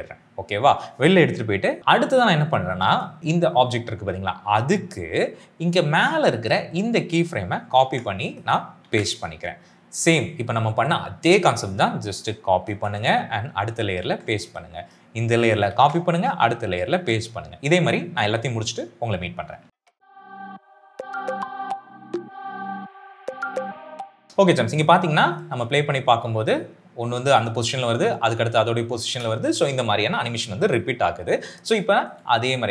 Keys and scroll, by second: 7.8 ctrl+c, 8.8 ctrl+v, 12.7 ctrl+c, 13.9 ctrl+v, 15.6 ctrl+c, 16.8 ctrl+v, 20.1 ctrl+v, 20.4 ctrl+v, 20.7 ctrl+v, 20.9 ctrl+c, 21.1 ctrl+v, 21.7 ctrl+c, 21.8 ctrl+v, 22.5 ctrl+v, 22.7 ctrl+c, 23.1 ctrl+v, 23.6 ctrl+v, 23.8 ctrl+c, 23.9 ctrl+v, 24.2 space, 25.4 space, 29.1 space.